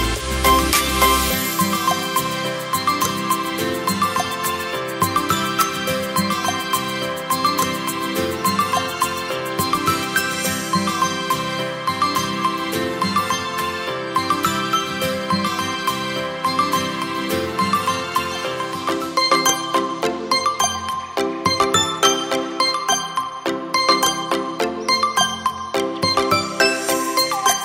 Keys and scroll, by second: 2.4 Return, 10.9 Return, 12.9 space, 24.0 space.